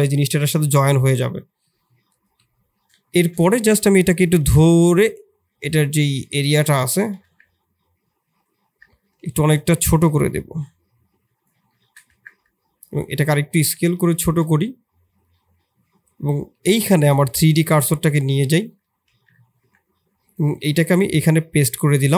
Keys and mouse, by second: 0.1-0.8 middle drag, 1.2 KP_1, 2.2 KP_3, 3.0 shift+click, 3.4 Tab, 4.1 shift+click, 4.4 shift+z, 5.2-6.3 drag, 6.4 shift+z, 6.9 shift+z, 7.4 1, 8.8 shift+click, 9.1 shift+z, 9.6 click, 11.7 shift+click, 12.1 Tab, 12.7 s, 13.4 shift+click, 13.9 shift+z, 15.4 click, 16.8 shift+click, 17.6 Tab, 18.3 3, 18.5 click, 19.0 shift+s, 19.6 Tab, 20.5 shift+s, 21.1 click, 21.7 shift+click.